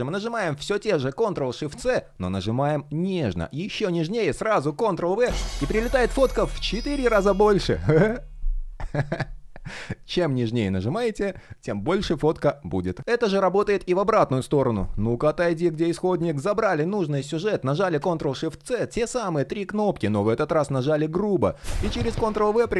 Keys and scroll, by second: 1.5 shift+super+c, 4.8 super+v, 17.6 shift+super+c, 21.5 super+v.